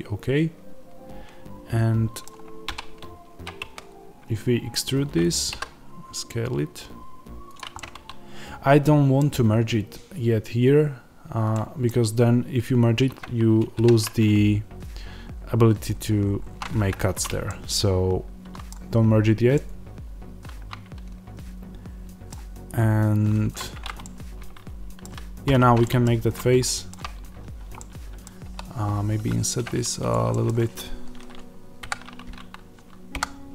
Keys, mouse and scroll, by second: 5.2 click, 5.4 s, 7.5 click, 7.7-23.5 middle drag, 13.7 ctrl+r, 23.5 alt+click, 23.9-30.0 middle drag, 25.4 f, 26.1-26.5 scroll up 1, 28.3 i, 30.0 click, 30.2-33.5 middle drag, 31.7 KP_7, 33.1 KP_1.